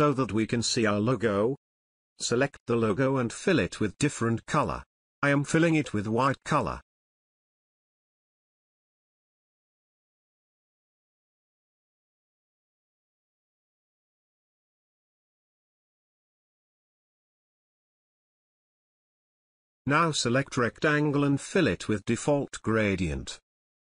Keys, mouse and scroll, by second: 4.9 space, 5.1 alt+click, 5.5 click, 6.0 ctrl+click, 7.5-8.4 alt+shift+click, 8.8 ctrl+space, 9.1 ctrl+click, 9.4 ctrl+space, 10.4 ctrl+alt+click, 23.1 click.